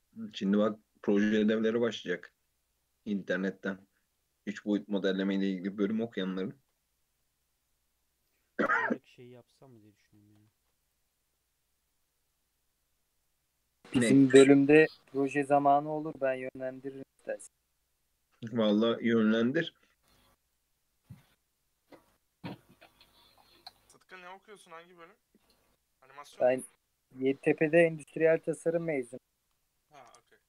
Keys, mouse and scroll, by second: 0.6-1.1 scroll down 3, 1.1-1.7 right drag, 1.7-2.8 middle drag, 2.8 scroll down 1, 4.8 KP_3, 5.6 Tab, 5.9 alt+z, 6.4 shift+middle drag, 6.6-7.3 shift+scroll up 2, 7.3 Tab, 9.4 Tab, 10.2-10.6 shift+middle drag, 10.6 ctrl+r, 13.5 Tab, 13.8-14.5 scroll down 1, 14.5 shift+middle drag, 14.8-15.7 scroll up 2, 15.7 ctrl+r, 16.2 Tab, 16.7 ctrl+r, 21.1 alt+click, 22.3 2, 22.9 ctrl+r, 25.3 ctrl+r, 27.0 1, 27.2 click, 27.6 shift+click, 28.5 j, 29.0 click, 29.3 2, 29.7 alt+click, 30.1 s.